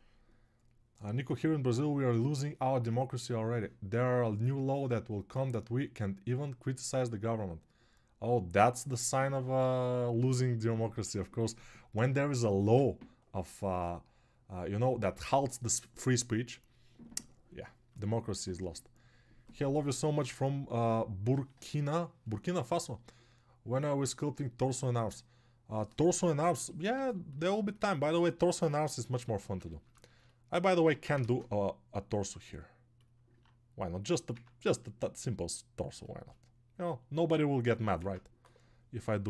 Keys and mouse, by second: 28.7-31.2 ctrl+alt+drag, 28.7-31.2 ctrl+alt+middle drag, 28.7-31.2 ctrl+alt+right drag, 31.1 ctrl+Tab, 31.2 shift+a, 35.9 shift+Tab, 38.0 ctrl+Tab.